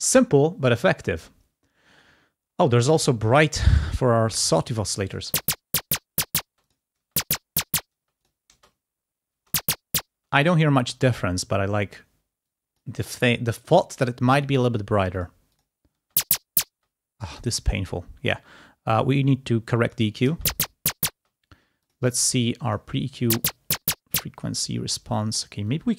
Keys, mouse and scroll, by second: 3.8 click, 5.2 space, 6.4 space, 6.6 click, 7.9 space, 9.3 space, 10.1 space, 12.4 click, 13.6 click, 15.2 click, 15.5 click, 15.9 space, 17.1 click, 18.9-20.0 drag, 20.3 space, 21.2 space, 21.8 click, 22.7 click, 23.0 space, 24.1 space, 25.7 click.